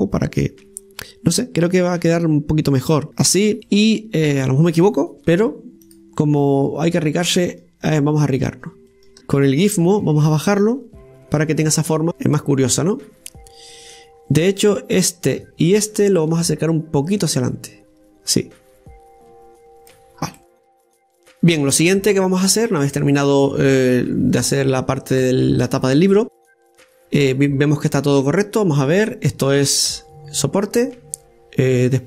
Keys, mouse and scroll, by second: 3.5 middle click, 4.0-4.5 scroll up 2, 4.5 middle click, 5.5-6.7 right drag, 6.7 click, 7.5-9.1 right drag, 9.1 middle click, 9.2 click, 11.3 click, 11.9-13.3 middle drag, 15.0-15.7 scroll up 1, 15.7-17.9 right drag, 17.9-20.9 drag, 20.9 scroll down 2, 21.2 middle click, 22.0-22.5 scroll down 1, 22.5-24.9 middle drag, 24.9-25.2 scroll down 2, 25.2 middle click, 26.1-29.1 scroll up 1, 29.9 Tab.